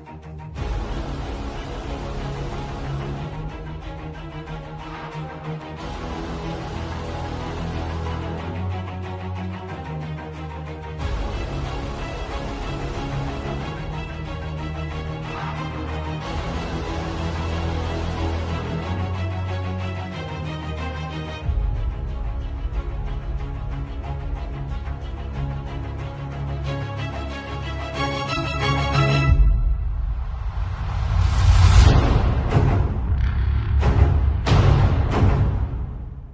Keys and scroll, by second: 2.7 [, 3.6 [, 5.2-7.9 typing, 10.7 ], 11.2 ], 12.0 [, 15.7 x, 17.1 z, 17.6 space, 18.1 v, 20.5 super+g, 20.7 super+space, 23.0 space, 24.2 Right, 24.3-25.1 typing, 28.4 super+t, 33.2 Return, 33.5 alt+shift+s, 33.8 alt+shift+super+t, 34.1 alt+shift+super+t.